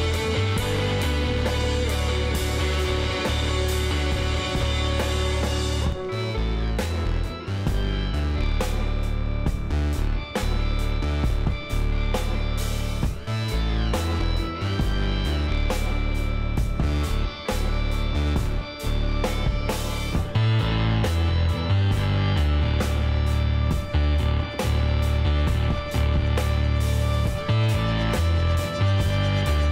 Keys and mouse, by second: 2.0-3.9 drag, 4.3-6.6 middle drag, 9.4-11.2 drag, 11.8 ctrl+z, 14.8-15.8 drag, 15.8 middle click, 16.6 Tab, 19.2-20.9 middle drag, 20.3 KP_1, 21.2 z, 22.9 middle click, 23.3-24.7 drag, 24.2 b, 27.8 x.